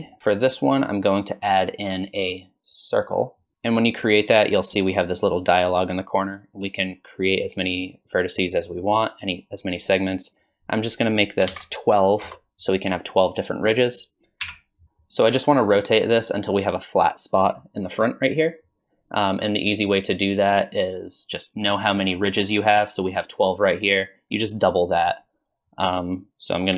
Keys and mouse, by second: 0.2 shift+a, 5.7 click, 10.5-14.4 drag, 14.4 KP_7, 14.8 ctrl+z, 25.5-26.7 drag.